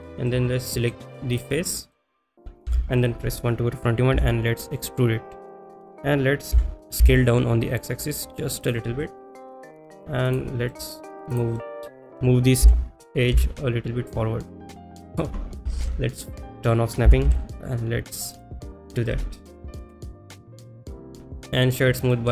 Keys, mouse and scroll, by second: 0.3 middle click, 1.7 middle click, 2.7 KP_1, 8.7 click, 8.7 s, 8.7 x, 9.0 middle click, 10.3 click, 10.7 middle click, 11.4 click, 11.6 middle click, 15.1 click, 15.1 g, 15.1 y, 16.2 ctrl+z, 16.2 click, 18.0 g, 18.0 y, 18.4 click, 18.7 middle click, 20.9 click.